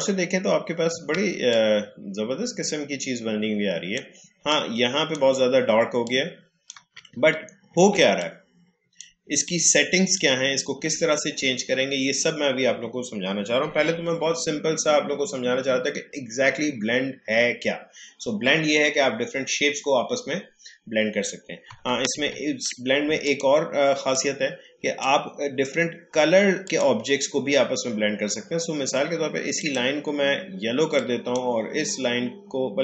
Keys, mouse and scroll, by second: 1.5 click, 1.6 space, 4.4 click, 4.8 space, 6.0 click, 6.3 space, 7.1-7.4 alt+scroll down 1, 7.9 space, 8.2 click, 8.4 space, 9.4-12.7 drag, 22.1 ctrl+z, 29.6-32.8 drag.